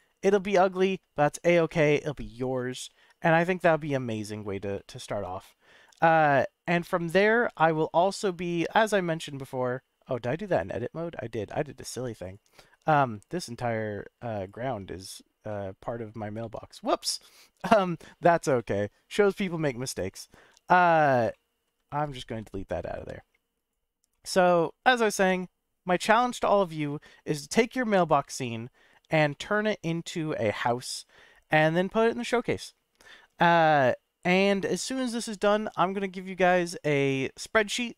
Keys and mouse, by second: 1.8 ctrl+click, 2.6 ctrl+click, 3.3 middle drag, 3.8 click, 4.1 middle click, 4.7 middle click, 5.2-5.8 drag, 7.0 middle click, 7.4 click, 7.9-8.4 drag, 10.1 Tab, 10.5 click, 11.3 Tab, 11.9 Tab, 12.3 click, 13.2 alt+click, 14.4 alt+click, 15.4 middle click, 16.4 Tab, 17.0 middle click, 17.7 Tab, 18.5 middle click, 19.8 middle click, 20.8 shift+click, 21.3 middle click, 22.0 shift+click, 22.2 x, 24.1 middle click, 25.2 Tab, 25.8-26.1 middle drag, 27.7 click, 27.9 x, 29.3-29.7 middle drag, 30.5 KP_Decimal.